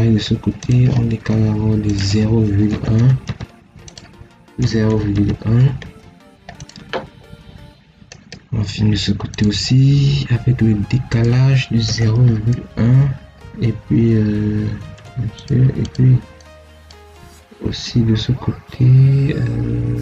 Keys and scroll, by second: 2.6 0, 2.8 ., 3.1 1, 4.5 0, 4.8 ., 5.0 1, 11.7 0, 12.0 ., 12.4 1, 14.8 BackSpace.